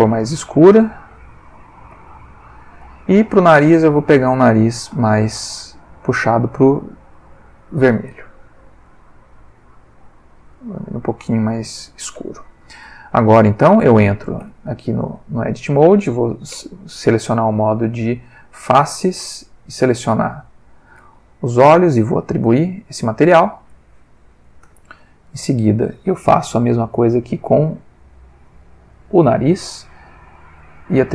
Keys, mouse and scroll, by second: 0.0-1.7 drag, 1.9 click, 2.8 click, 4.3 click, 5.3-7.8 drag, 9.7 click, 10.4-12.2 drag, 12.9-13.8 ctrl+middle drag, 14.4 ctrl+Tab, 15.1 ctrl+middle click, 16.5 3, 17.8 click, 18.6 c, 18.8 click, 19.5 Escape, 20.1 c, 20.3 click, 20.7 Escape, 21.8 click, 22.4 click, 23.7 click, 24.6 Tab, 25.1 ctrl+middle click, 25.6 ctrl+Tab, 26.6 alt+click, 27.6 c, 28.1 click, 29.1 Escape, 30.6 click.